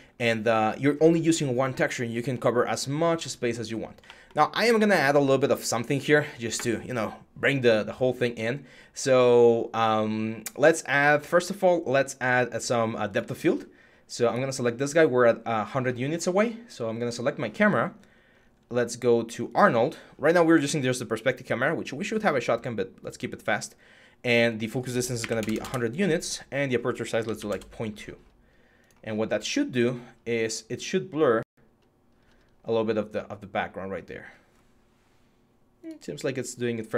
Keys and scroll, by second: 24.7-27.6 typing.